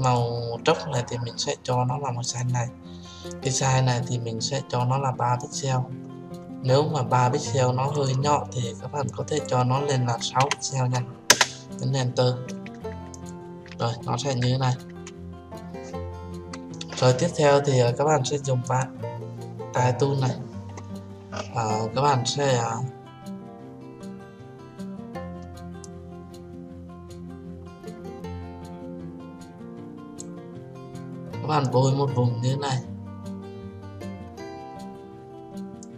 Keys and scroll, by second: 11.2 Return.